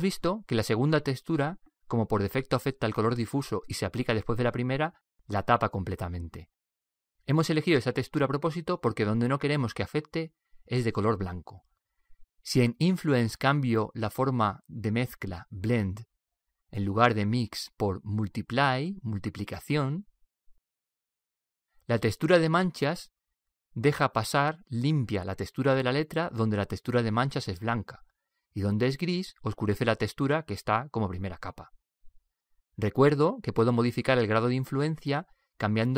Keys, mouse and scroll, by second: 0.2-2.0 middle drag, 13.5 click, 22.9-24.6 middle drag, 30.0-32.0 middle drag.